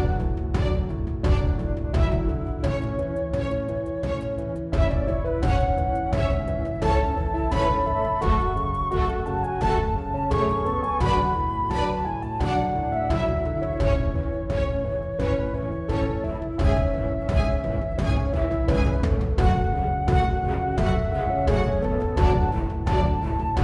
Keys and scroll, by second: 6.4 3, 6.5 Return.